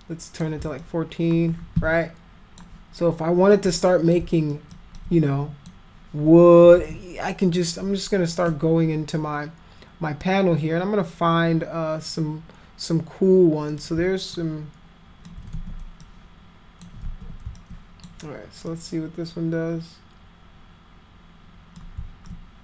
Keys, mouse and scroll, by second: 0.8-2.6 alt+drag, 3.6 alt+click, 4.5 alt+click, 5.0 alt+click, 6.8 ctrl+z, 7.6 click, 13.7 click, 14.4 alt+click, 15.6 ctrl+z, 16.0 click, 17.1 ctrl+z, 17.6 alt+click, 18.7-21.8 drag, 22.3 click.